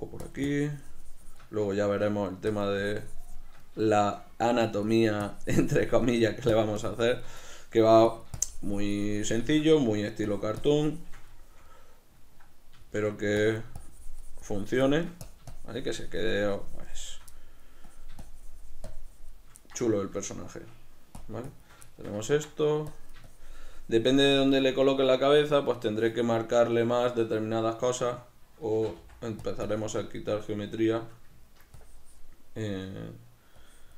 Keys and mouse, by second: 0.4-1.8 shift+drag, 1.8 shift+middle click, 2.6-4.0 shift+drag, 4.0-5.0 shift+middle drag, 5.0-7.6 drag, 7.6 shift+middle click, 8.1-9.8 shift+drag, 9.8 middle click, 10.3-11.4 drag, 11.4-13.5 shift+middle drag, 13.5-17.4 drag, 17.4 middle click, 18.0-19.7 drag, 19.7-21.3 middle drag, 21.3 shift+click, 22.0-23.0 shift+middle drag, 23.0-25.3 drag, 25.3-29.6 shift+middle drag, 28.8 shift+c, 29.8-31.0 drag, 31.0 shift+middle click, 31.9-33.9 drag.